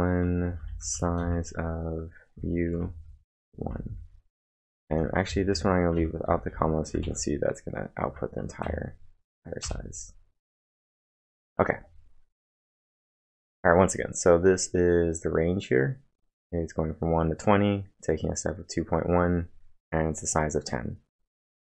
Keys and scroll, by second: 1.2-7.5 typing, 8.0 ctrl+`, 8.6 Up, 9.6 Return.